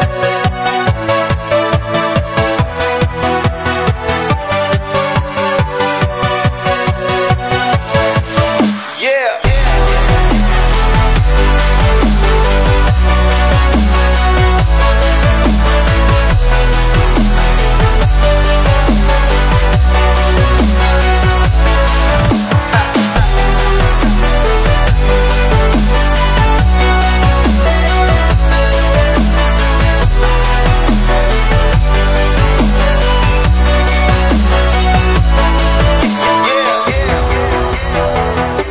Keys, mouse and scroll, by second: 0.0-0.9 drag, 0.9-1.3 scroll up 3, 1.3-2.0 shift+middle drag, 2.0-2.8 drag, 3.5-3.8 middle drag, 3.9 drag, 5.5 click, 5.9 click, 9.2-11.7 drag, 11.7-12.3 scroll down 2, 12.3-12.7 drag, 12.7-13.3 scroll down 4, 13.3-14.4 drag, 15.0 click, 16.2 h, 16.5-16.8 middle drag, 17.0 shift+middle click, 17.5 scroll down 1, 17.7 middle click, 18.2 scroll up 1, 18.3-19.4 middle drag, 19.4-19.9 scroll down 2, 19.9-20.4 scroll up 1, 20.4 scroll up 2, 20.6-21.1 middle drag, 21.1-21.6 ctrl+z, 21.8 ctrl+z, 22.0 ctrl+z, 22.4-22.8 drag, 22.8 Delete, 23.1 middle drag, 23.4 click, 23.6 shift+middle click, 24.2-24.8 drag, 24.8 middle click, 25.6 ctrl+r, 28.3 middle click, 28.8 ctrl+r, 30.0 click, 30.7 ctrl+b, 31.6 middle click, 32.4 s, 33.8 middle click, 34.3 click, 34.6 shift+middle click, 34.9 click, 34.9 3, 35.2 click, 35.8-36.2 scroll up 1, 36.2 shift+middle drag, 36.4 scroll up 1, 36.5-37.6 middle drag, 37.6 i.